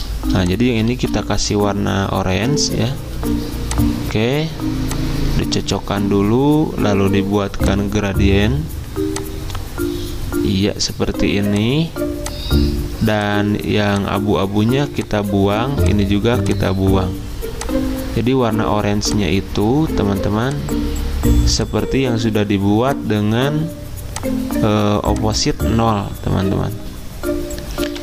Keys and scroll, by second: 27.9 g.